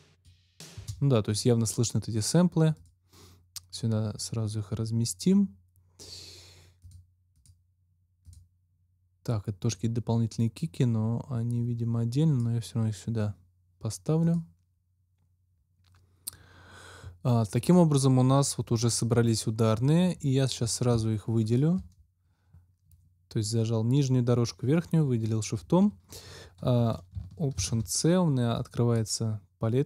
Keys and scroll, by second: 0.7 space, 27.5 alt+c.